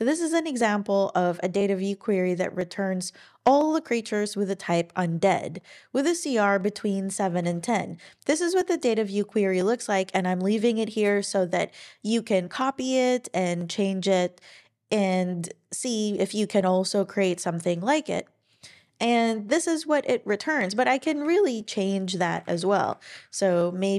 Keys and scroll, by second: 21.0 Down, 21.2 Down, 22.2 alt+Right, 22.4 alt+Right.